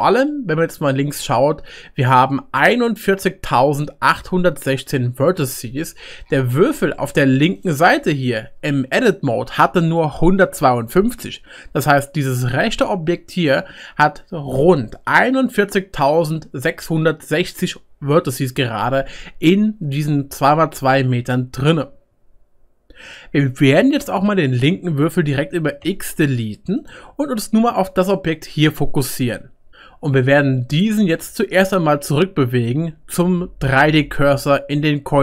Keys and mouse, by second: 6.0-7.6 drag, 6.0-8.0 middle drag, 6.0-25.8 right drag, 8.9 Tab, 11.1 Tab, 25.8 x, 28.0 click, 29.0-34.4 middle drag, 29.0-35.2 right drag.